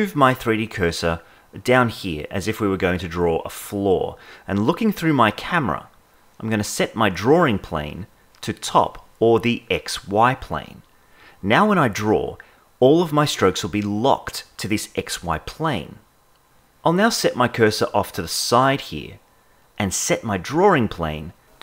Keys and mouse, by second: 7.4-11.3 drag, 12.5 click, 13.0 click, 13.4 click, 13.7 click, 14.0 click, 14.2 click, 14.5 click, 14.7 click, 15.1 click, 15.4 click, 15.8 click, 15.9 KP_0, 19.6-21.6 drag.